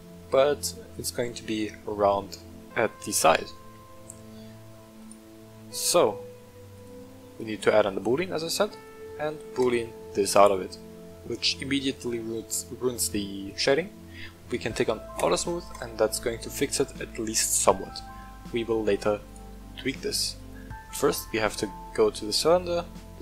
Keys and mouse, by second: 2.1 middle drag, 3.5-4.7 middle drag, 5.0 click, 6.8 click, 8.7 click, 10.0-11.0 middle drag, 11.5 shift+middle click, 13.4 click, 15.2-15.8 drag, 16.1-16.7 middle drag, 17.9-18.9 middle drag, 19.2 right click, 20.3 click.